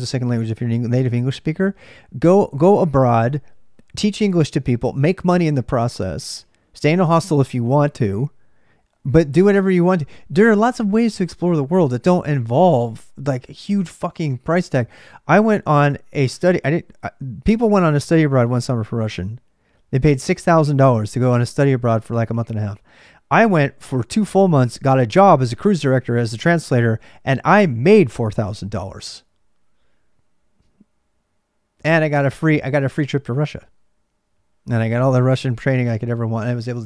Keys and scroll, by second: 0.0-36.8 typing.